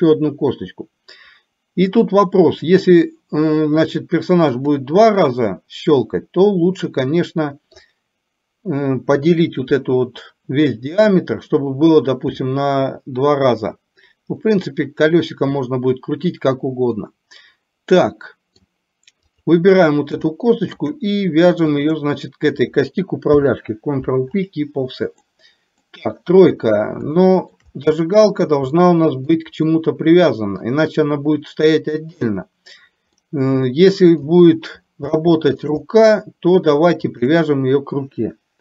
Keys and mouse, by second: 5.3-7.9 middle drag, 9.3 KP_3, 17.2-18.8 middle drag, 19.3 click, 20.4 shift+middle click, 21.8 shift+click, 23.4 ctrl+p, 25.3 middle click, 26.0 KP_3, 27.3 shift+middle click, 28.9 shift+middle click, 29.9 middle click, 33.4 middle click, 35.2 shift+middle click, 37.2 shift+click.